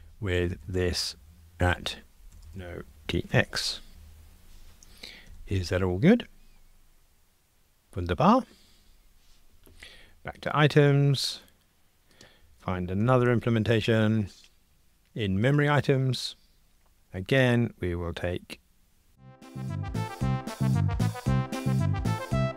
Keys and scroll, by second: 5.3 ctrl+r, 13.1 super+b, 19.5 super+c, 20.0 super+v, 20.6 Return, 21.9 super+c, 22.1 super+v, 22.5 alt+shift+Right.